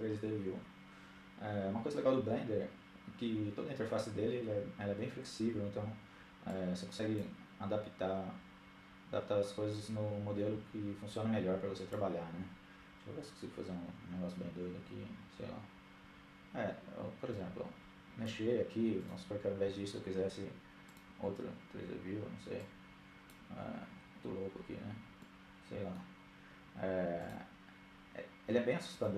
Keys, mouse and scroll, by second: 7.2-8.6 drag, 10.5-11.9 drag, 18.4-19.6 drag, 20.1-21.2 drag, 23.8-25.2 drag, 25.0-27.8 middle drag, 28.5-29.1 drag.